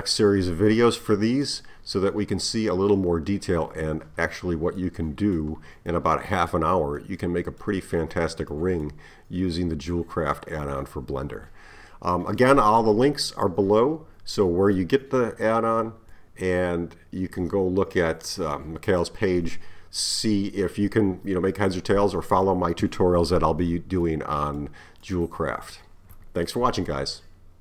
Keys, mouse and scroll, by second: 4.8-7.0 middle drag, 7.0-8.1 scroll up 1, 8.1-8.5 scroll down 1, 8.5-11.5 middle drag, 24.1-27.6 middle drag.